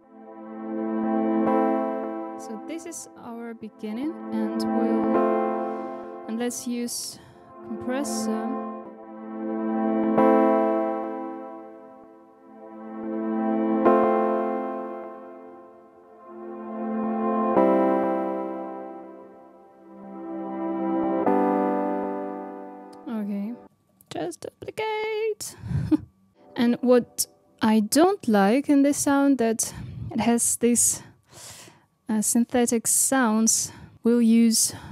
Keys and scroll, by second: 8.2 space, 24.7 super+d, 26.3 space.